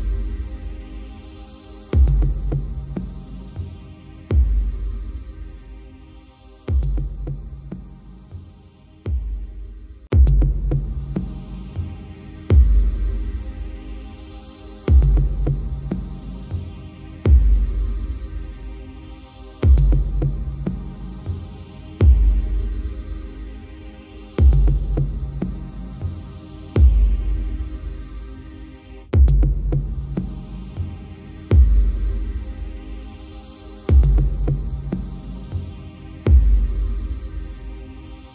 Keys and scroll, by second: 9.3 ctrl+j, 17.3 ctrl+j, 20.2 ctrl+u, 36.3 ctrl+u.